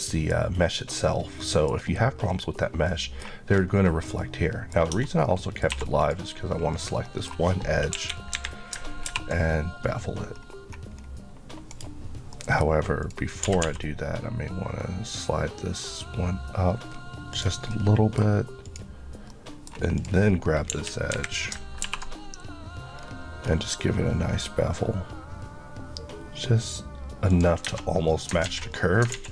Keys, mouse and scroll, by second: 2.2 scroll down 1, 2.9 middle click, 4.9 Tab, 5.3 middle click, 5.7 2, 6.0 click, 7.1 middle click, 8.0 KP_1, 8.4 KP_3, 9.1 ctrl+b, 10.3 scroll up 1, 11.7 right click, 12.3 middle click, 13.0 click, 13.5 typing, 17.4 click, 17.8 middle click, 18.7 click, 19.3 middle click, 20.0 click, 20.7 KP_1, 21.1 KP_3, 21.9 ctrl+b, 23.0 scroll up 1, 27.3 click, 27.7 Tab, 28.1 scroll down 1, 28.5 alt+z, 28.8 middle click, 29.1 alt+z.